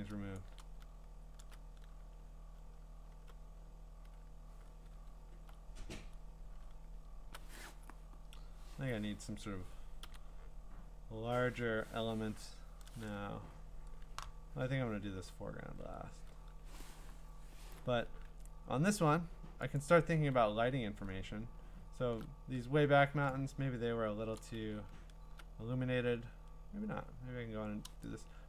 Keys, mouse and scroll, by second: 0.2-0.8 scroll, 0.4 click, 1.2-3.1 scroll, 3.1 b, 10.0-13.2 middle drag, 19.8 click, 20.4-21.4 scroll, 21.9-22.6 scroll, 22.6 middle click, 23.6-24.4 scroll, 24.4 click, 24.8 middle click, 25.0-25.3 scroll down 6, 26.3-26.7 scroll down 3, 26.8 scroll up 2, 27.5 scroll.